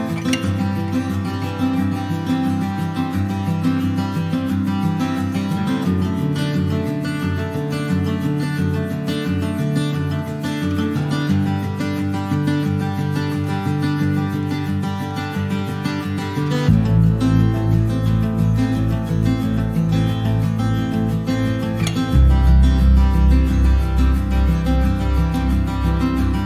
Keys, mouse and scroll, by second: 0.3 ctrl+v, 1.1 middle click, 1.7 click, 3.9 middle click, 4.1 scroll up 1, 4.3 click, 4.6 middle click, 4.9 shift+a, 6.6 scroll up 1, 6.8 middle click, 7.1 shift+a, 12.0-13.4 drag, 13.4-18.8 middle drag, 18.8 click, 19.0-19.3 scroll down 3, 19.3 shift+middle click, 19.8-21.5 scroll up 1, 21.5 click, 24.0 click.